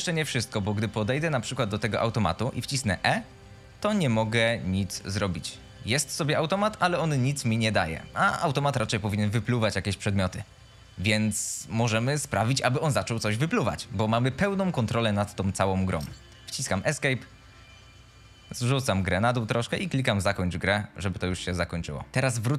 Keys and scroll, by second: 0.0-0.5 typing, 2.7 e, 3.9 e, 4.3 a, 4.9 d, 6.2 a, 16.1 Escape.